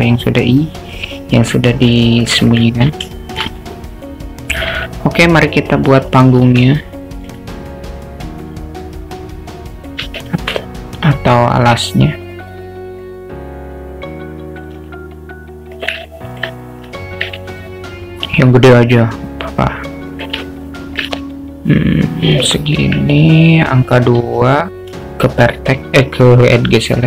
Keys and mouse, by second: 2.0-2.5 alt+middle drag, 3.1 alt+shift+middle drag, 3.5-4.8 alt+middle drag, 5.8 click, 8.1-10.0 drag, 10.3 shift+a, 13.1-14.7 drag, 14.7 s, 16.1-16.4 alt+middle drag, 17.4 s, 20.5-21.0 alt+middle drag, 21.9 click, 22.8 Tab, 24.2 3, 24.9 2.